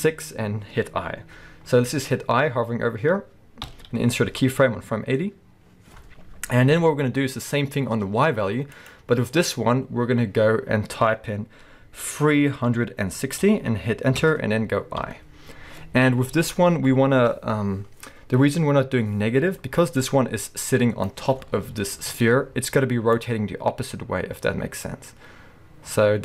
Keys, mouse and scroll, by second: 7.1-7.9 scroll down 2, 7.9-8.7 scroll down 1, 8.7-21.8 drag, 14.3 Return, 15.0 i, 21.3-21.8 scroll down 2, 21.8-23.1 shift+middle drag, 22.1 scroll up 2, 23.1-26.2 drag.